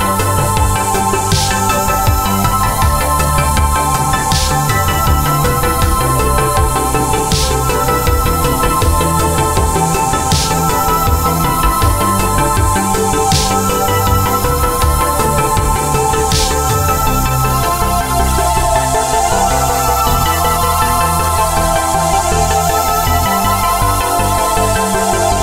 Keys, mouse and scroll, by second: 3.1 alt+shift+click, 3.9 click, 8.5 a, 9.3 click, 9.6 i, 10.3 click, 10.5 a, 11.8 click, 12.0 i, 12.9 click, 13.7 a, 14.8 click, 15.0 i, 15.7 click, 16.0 a, 16.2 click, 18.3 i, 19.0 click, 19.3 a, 19.4 click, 20.8 i, 22.1 click, 22.3 a, 22.8 click.